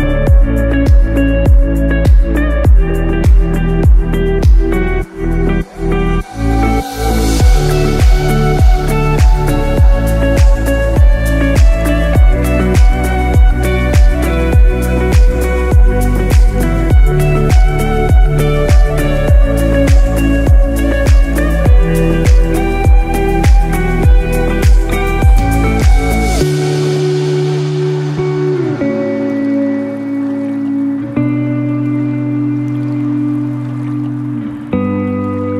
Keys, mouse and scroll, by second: 0.4 scroll up 2, 0.8 scroll down 2, 1.3 shift+middle click, 9.5-9.9 scroll down 2, 10.1 shift+middle click, 10.9 Tab, 11.3 middle click, 13.3 middle click, 14.4 Tab, 14.8 middle click, 16.7 shift+middle click, 17.1 middle click, 17.5-17.9 scroll up 2, 17.9 shift+middle click, 18.4 middle click, 21.8 f, 22.5 middle click, 23.3 shift+middle click, 23.7 scroll up 1, 24.6 ctrl+KP_7, 25.2-25.6 scroll up 2, 25.6 shift+middle click, 27.3 i, 29.5 middle click, 30.9 g.